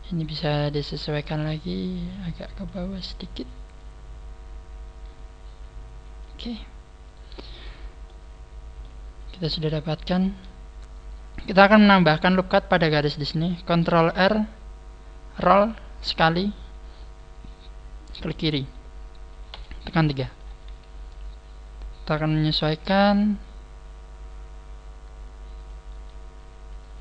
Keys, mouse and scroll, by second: 0.9 right click, 0.9 scroll up 1, 1.4 click, 3.7 right click, 3.7 click, 6.6-6.9 scroll down 3, 7.0 right click, 8.0 middle click, 9.3 middle click, 11.8-12.6 scroll up 2, 13.5 scroll up 2, 15.2 ctrl+r, 19.4 click, 19.5 KP_3, 20.3 scroll down 3, 21.2 scroll up 1, 22.5 KP_3, 22.8 g, 22.9 scroll up 1, 25.9 click, 26.7 click, 26.7 right click.